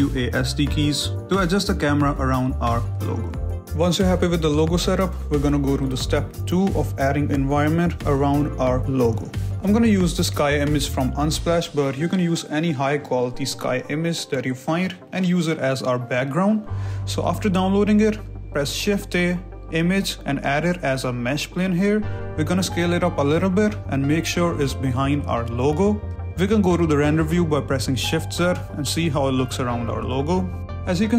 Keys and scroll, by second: 0.0-2.6 typing, 1.5 Escape, 3.7 w, 8.4 w, 16.0 alt+Tab, 16.7 shift+a, 21.1 g, 22.3 s, 23.0 g, 24.2-27.3 typing, 26.9 Return, 29.0 a, 29.3 z.